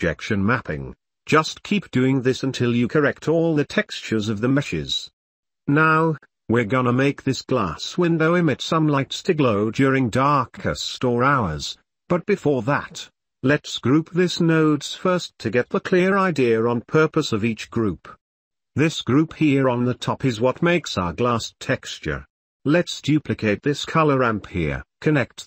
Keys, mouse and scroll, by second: 0.0 Tab, 0.2 Tab, 0.5 Tab, 0.7 ctrl+s, 1.1 Tab, 1.1 click, 1.6 Tab, 1.7 Tab, 1.8 u, 2.1 Tab, 2.2 click, 2.7 g, 3.0 t, 3.1 Tab, 3.1 shift+click, 3.4 Tab, 3.7 shift+click, 4.0 g, 4.5 Tab, 4.5 click, 4.8 ctrl+s, 5.0 Tab, 5.0 Tab, 5.2 click, 5.5 click, 6.7 middle click, 7.2-7.9 middle drag, 10.8 click, 11.0 click, 17.2-17.7 shift+middle drag, 18.1-18.6 middle drag, 18.9 w, 19.8 w, 22.9 click, 24.5 shift+click, 25.3 click.